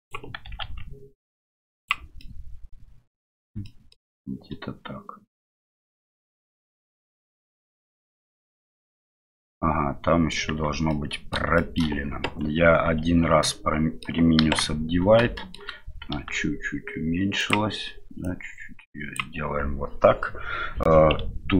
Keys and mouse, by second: 2.3-3.4 middle drag, 3.7 shift+middle click, 4.2-6.9 middle drag, 7.0 middle click, 8.2-10.4 middle drag, 10.5 Tab, 10.9-11.4 middle drag, 11.6 shift+middle drag, 13.4 middle click, 14.4 KP_1, 18.3-21.2 drag.